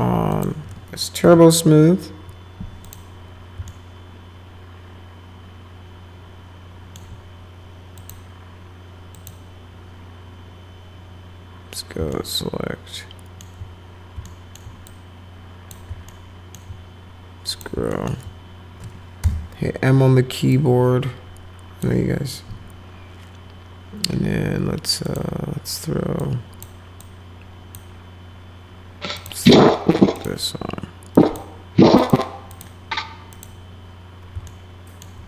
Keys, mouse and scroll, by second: 0.3 click, 1.2 t, 2.8 click, 3.7-7.0 alt+middle drag, 7.9 click, 9.1 click, 12.1-13.4 alt+middle drag, 14.2 alt+middle click, 14.8 click, 16.1 alt+middle click, 17.5 click, 17.9 alt+middle click, 19.2 m, 20.5-21.8 drag, 25.0 click, 26.2 click, 27.0 click, 29.2 click, 30.1 click, 31.1 click, 32.0 click, 32.5 click, 33.3 click, 34.5 alt+middle click.